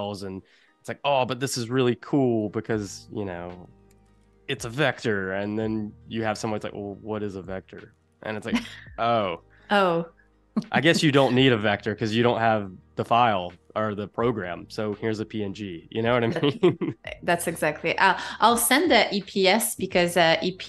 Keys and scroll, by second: 3.8 i, 5.3 a, 9.1 z, 9.9 a, 16.7 super+-, 18.1 space.